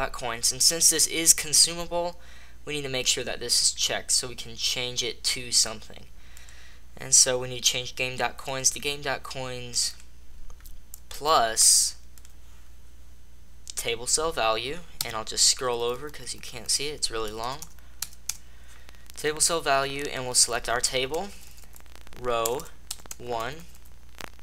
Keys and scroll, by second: 14.9 Right, 15.3 Left, 15.5 Left, 15.7 Left, 15.8 Left, 15.9 Left, 16.1 Left, 16.2 Left, 16.4 Left, 16.5 Left, 17.1-18.1 typing, 21.2 Right, 21.3 Right, 21.5 Right, 22.3 BackSpace, 22.5 BackSpace, 22.7 BackSpace, 23.2 Right, 23.4 Right, 23.6 Right, 23.9 Right.